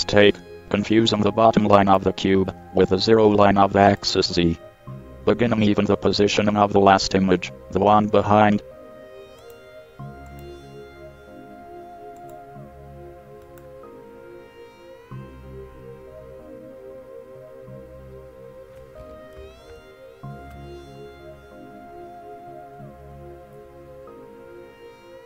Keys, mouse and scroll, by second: 16.3-18.6 middle drag, 19.9 ctrl+KP_1.